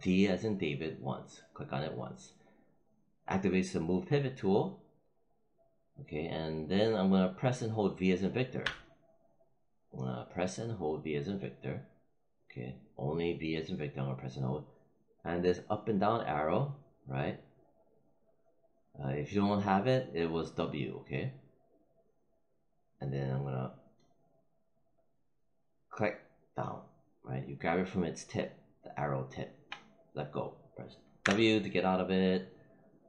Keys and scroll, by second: 8.5 v, 31.1 w.